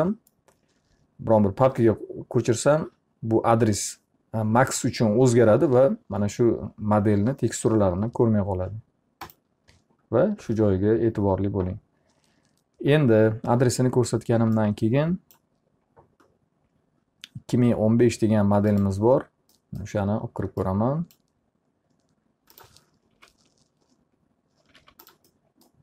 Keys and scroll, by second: 22.6 ctrl+z, 23.2 ctrl+z, 24.7 alt+r.